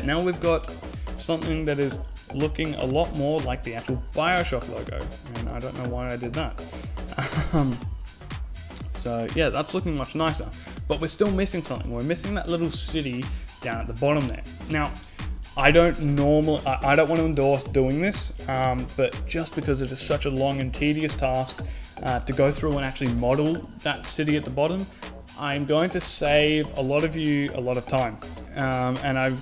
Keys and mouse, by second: 1.2 KP_7, 1.5 KP_5, 5.4-6.9 super+right drag, 6.2 z, 12.6 a.